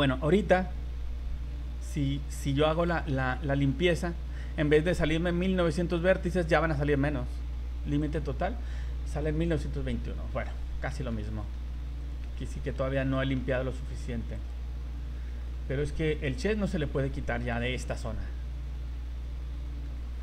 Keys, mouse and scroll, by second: 0.6 scroll down 2, 1.5 v, 2.5 v, 3.2 a, 3.5 a, 8.0 click, 11.1 ctrl+z, 11.2 middle click, 11.6 scroll up 2, 12.0 right click, 12.4 shift+middle click, 12.8 z, 13.1 middle click, 14.3 click, 15.1 scroll up 2, 16.1 click, 18.0 middle click.